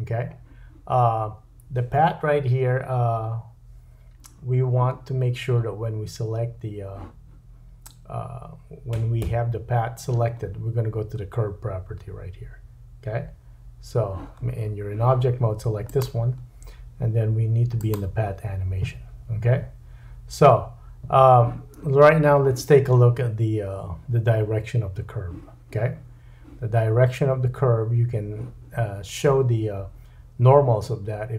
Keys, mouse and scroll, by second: 15.9 click, 17.8-31.3 drag.